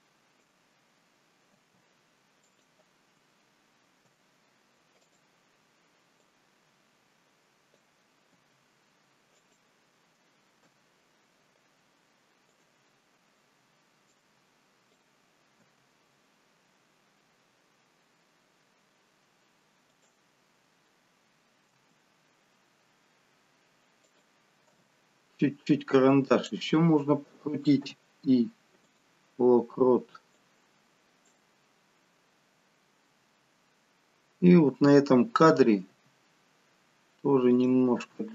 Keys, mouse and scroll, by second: 1.5 g, 4.0 i, 6.2 click, 8.3 g, 10.6 i, 14.1 click, 15.5 g, 21.7 r, 24.6 g, 27.7 i, 30.3 click, 35.8 r.